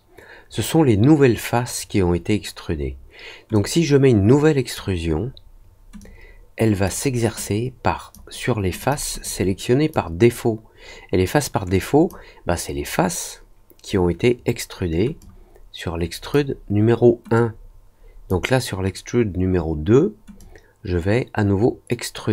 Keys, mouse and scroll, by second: 3.5-4.7 drag, 5.9 click, 7.4 click, 8.7 click, 9.2 click, 11.7 click, 15.1-16.3 drag, 17.3 click, 20.3 click.